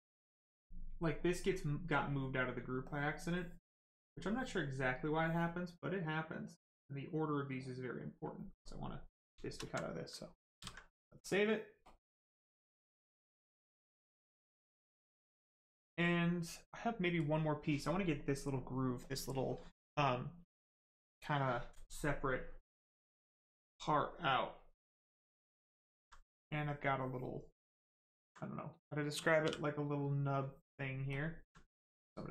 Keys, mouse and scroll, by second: 0.7 right click, 1.9 click, 4.7 right click, 5.7 click, 8.6 click, 8.9 right click, 9.6 alt+right click, 10.1 ctrl+right click, 10.5 ctrl+s, 11.8 click, 25.5 alt+right click, 27.3 right click, 28.5 right click, 29.4 shift+w, 29.7 right click, 31.1 alt+click, 31.7 right click.